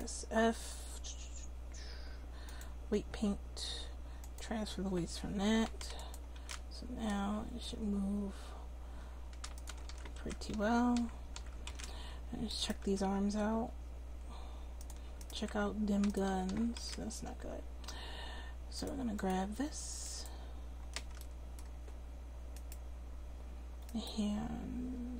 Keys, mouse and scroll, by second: 4.2-7.9 drag, 6.3 r, 9.8-11.3 typing, 10.2 alt+r, 11.7 alt+r, 12.8 r, 16.3 a, 16.5 a, 16.8 alt+r, 19.3 click, 19.6 click, 21.2-23.9 middle drag, 23.9-25.1 drag.